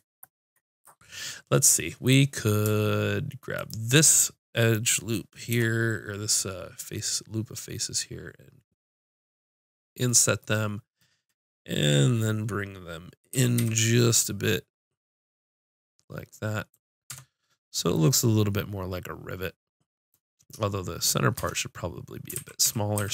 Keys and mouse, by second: 3.5-5.4 drag, 5.5 i, 10.1-11.7 drag, 13.3 g, 15.7 click, 17.0 Tab, 18.0 click, 21.3 Tab, 22.3 ctrl+z, 22.6 ctrl+z, 22.9 ctrl+z.